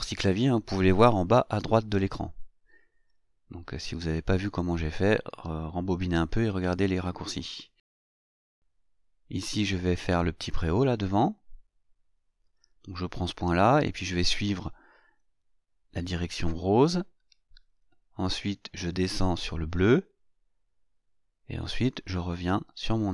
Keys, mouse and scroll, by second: 2.6 click, 10.1 click, 11.8 click, 16.7 click, 19.4 click.